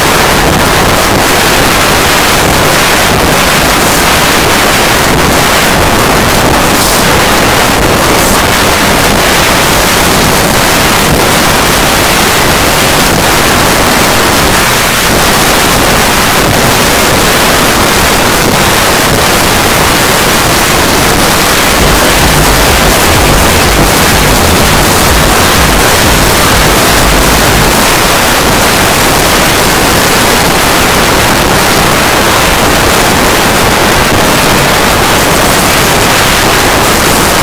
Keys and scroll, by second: 27.9 Page_Down, 37.3 space.